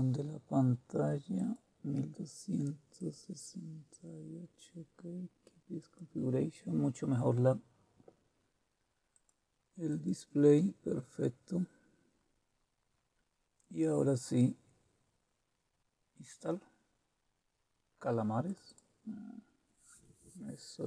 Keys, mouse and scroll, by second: 1.3 click, 2.9 click, 5.8 click, 9.1 click, 18.5 click, 18.7 click.